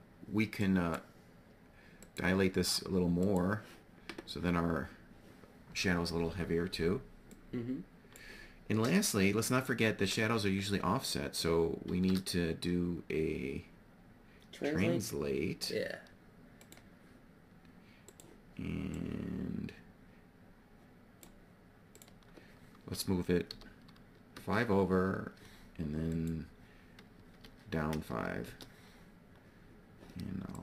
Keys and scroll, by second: 11.4 shift+a, 23.0 5, 24.3 Return, 27.4 -, 28.0 5, 28.4 Return.